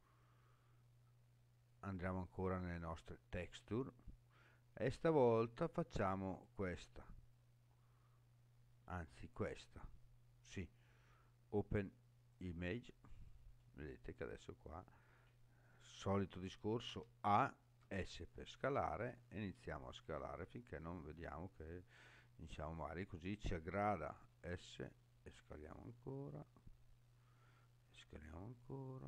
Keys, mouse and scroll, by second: 14.1-14.5 scroll up 2, 14.5 scroll down 2, 16.9 a, 17.8 s, 20.5 click, 21.5-22.0 scroll up 3, 23.1 scroll up 1, 24.2 s.